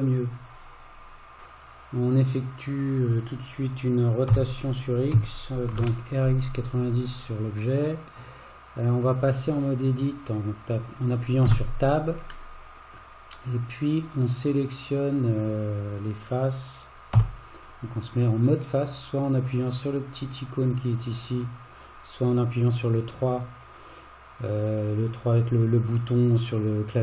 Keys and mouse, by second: 2.7 click, 4.3 r, 11.5 Tab, 12.5 middle click, 17.2 3.